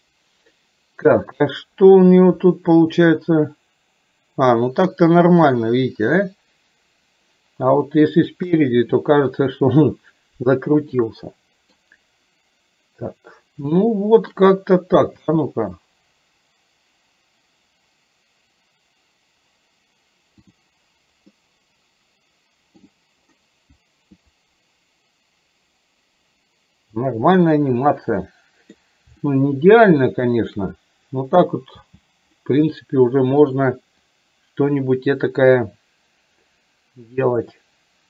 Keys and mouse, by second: 1.6 middle click, 3.2-8.1 middle drag, 8.6 KP_1, 11.1 middle click, 13.9 shift+middle click, 15.2 space, 21.5-22.8 middle drag, 28.2 middle click, 29.3-30.6 shift+middle drag, 31.8 space, 32.5 middle click, 33.6 click, 34.1-38.0 drag.